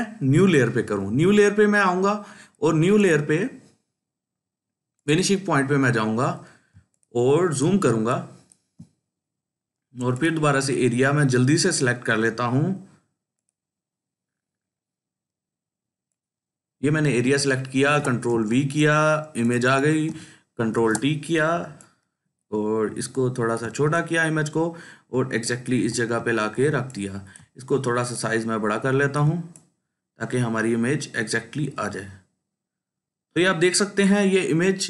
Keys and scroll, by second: 6.6 ctrl+space, 7.1-12.6 ctrl+space, 17.7 ctrl+v, 20.6 ctrl+t.